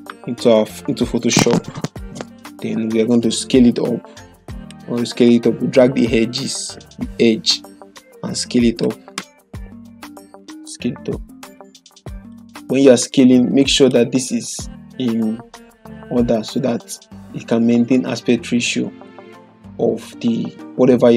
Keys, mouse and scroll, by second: 3.2 click, 3.3-4.8 drag, 11.7-12.5 drag, 17.9-19.2 drag.